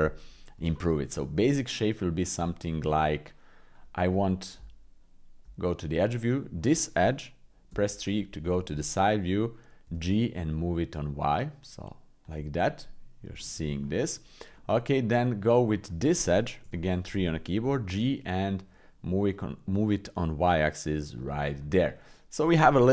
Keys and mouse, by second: 0.7 shift+middle click, 1.2-2.3 middle drag, 2.4 middle click, 4.5 Tab, 7.7 KP_3, 9.8 g, 13.3 shift+click, 14.5 middle click, 15.8 click, 16.6 KP_3, 17.6 g, 21.6 middle click.